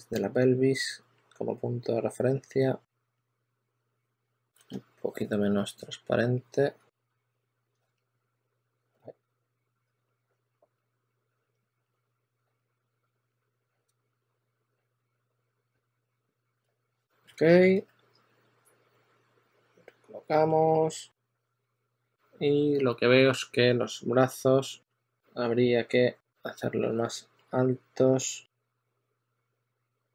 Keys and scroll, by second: 4.6 z, 7.6 z, 8.8 2, 16.2-18.1 typing, 27.1 typing.